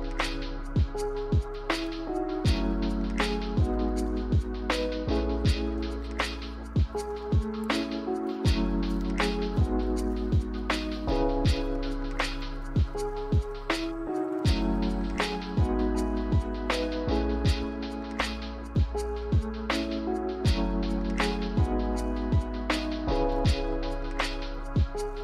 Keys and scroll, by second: 0.1 ctrl+z, 7.1 v, 9.0 Delete, 9.7 typing, 12.6 z, 14.0 z, 17.1 a, 20.8 a.